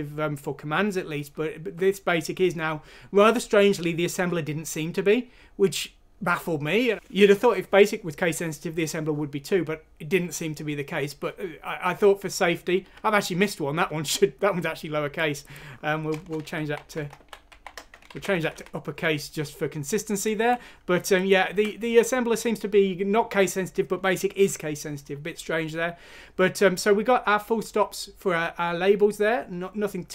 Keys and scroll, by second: 16.1-17.5 typing, 18.1 alt+f, 18.2 Down, 18.4 Down, 18.5 Down, 19.0 Up, 21.5 alt+Tab.